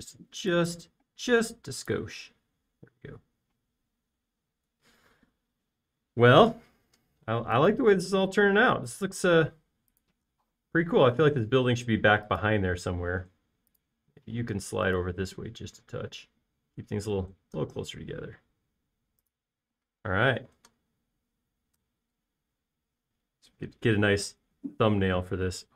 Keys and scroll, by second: 0.4 m, 3.9 space, 9.7-11.1 typing, 14.4 space, 15.8-16.2 typing, 21.6 space.